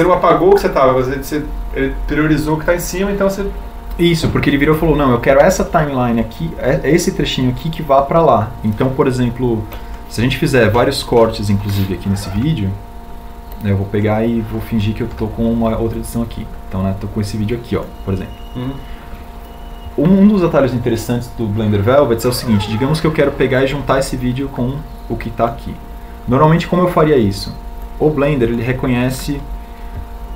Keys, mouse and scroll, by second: 14.5 k, 17.1 k.